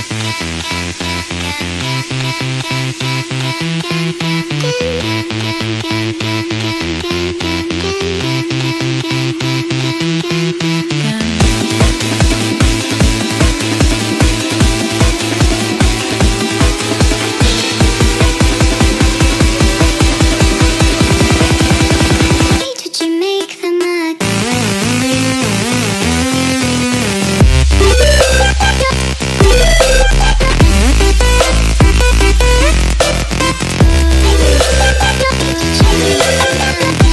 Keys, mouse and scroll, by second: 0.7 click, 1.0 ctrl+space, 1.3 ctrl+click, 1.6 click, 6.1 click, 6.2 ctrl+alt+z, 8.1 click, 8.6 ctrl+BackSpace, 9.3 ctrl+BackSpace, 9.8 click, 9.9 ctrl+BackSpace, 11.0 ctrl+space, 11.3 click, 11.9 click, 12.3 ctrl+h, 12.5 ctrl+space, 12.7 ctrl+click, 13.6 click, 14.0 ctrl+click, 14.6 click, 14.8 click, 15.0 ctrl+click, 16.5 click, 17.5 click, 17.7 click, 18.9 ctrl+click, 19.9 click, 20.9 click, 22.7 click, 24.8 click, 26.2 click, 27.2 click, 29.6 click, 31.2 click, 32.6 click, 34.5 click, 36.9 click.